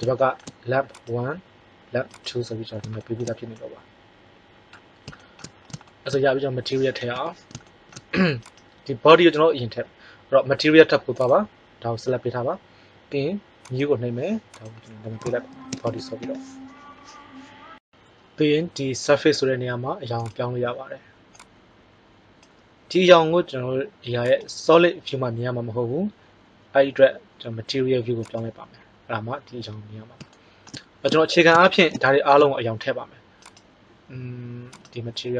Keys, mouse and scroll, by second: 0.8-2.6 right drag, 2.7 right click, 7.1 KP_1, 8.4 right click, 8.5-8.9 drag, 20.1-22.7 drag, 33.5 click.